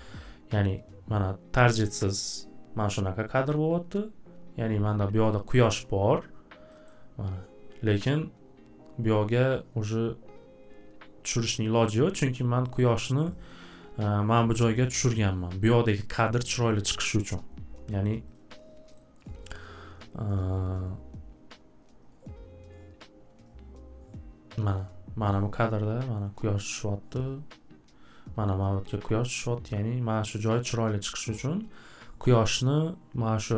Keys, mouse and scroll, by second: 6.9 scroll, 7.5 scroll, 12.9 middle click, 13.5 middle click, 17.3 scroll, 18.3 click, 18.9 middle click, 19.0-19.6 scroll, 19.0 click, 21.9 scroll, 22.5-22.9 scroll.